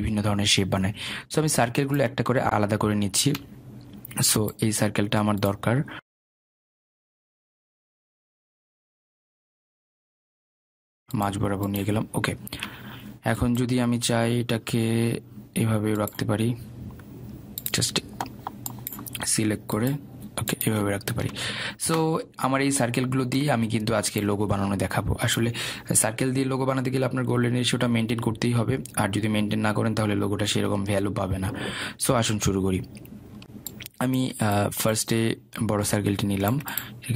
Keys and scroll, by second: 6.6 ctrl+z.